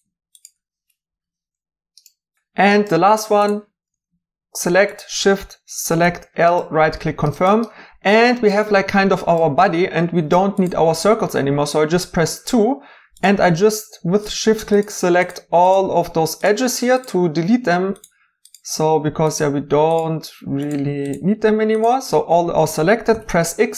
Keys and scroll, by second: 0.0 i, 0.7 i, 1.1 i, 1.7 i, 6.0 i, 23.1 x.